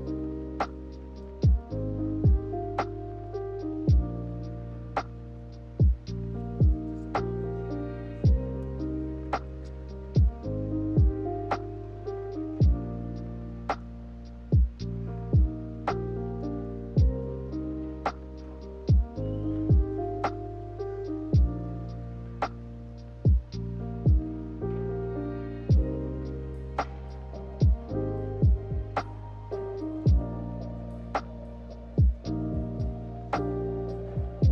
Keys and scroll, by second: 1.9 ctrl+z, 2.2 ctrl+z, 3.1 ctrl+z, 7.5 Delete, 8.3 z, 13.0-14.0 typing, 20.1 a, 21.1 ctrl+z, 22.2 z, 29.2 k.